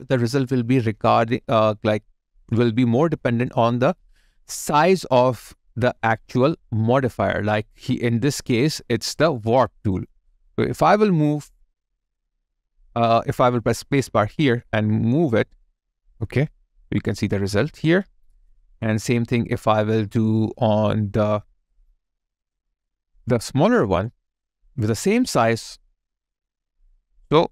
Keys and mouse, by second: 14.0 space.